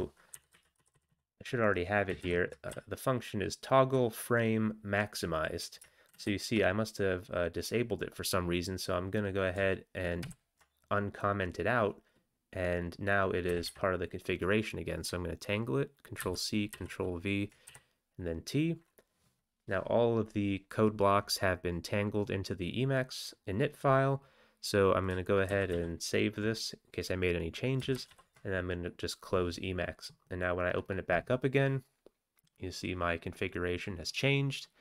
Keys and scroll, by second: 0.1-1.6 typing, 2.2 ctrl+a, 2.7 Right, 3.2 Right, 3.3-3.9 Right, 6.1 ctrl+a, 10.2 ctrl+d, 13.5 Up, 13.7 Up, 16.2 ctrl+c, 16.7 ctrl+v, 17.7 t, 25.5 ctrl+x, 25.7 ctrl+s, 27.9 ctrl+x, 28.1 ctrl+c.